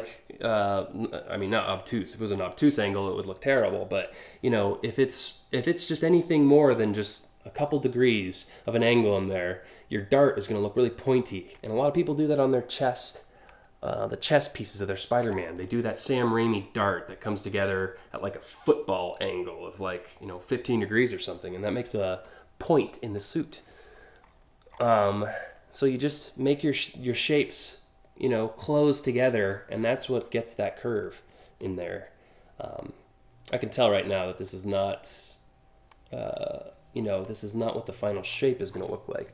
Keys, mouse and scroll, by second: 10.7-14.4 ctrl+drag, 22.8 scroll up 1, 23.4-24.0 scroll up 5, 24.3 alt+scroll down 2, 29.1 scroll down 5, 31.2-33.2 ctrl+drag, 34.1-35.5 ctrl+drag, 36.8 ctrl+click, 37.8-38.4 scroll down 2.